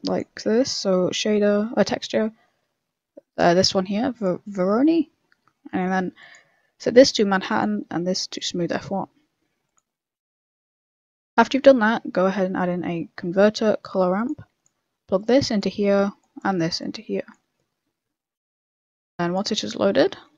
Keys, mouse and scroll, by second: 0.4 shift+a, 5.5 middle click, 6.2 click, 7.5 click, 9.1 z, 10.4 middle click, 11.0 middle click, 11.7 shift+a, 15.1 click, 16.2 click.